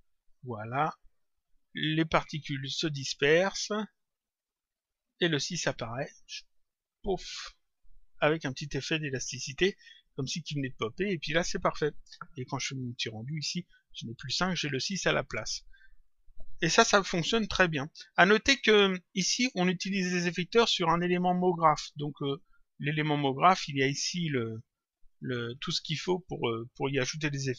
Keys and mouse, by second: 9.9 click, 12.8 click, 18.4 click, 20.0 click, 22.2 click, 25.0 click.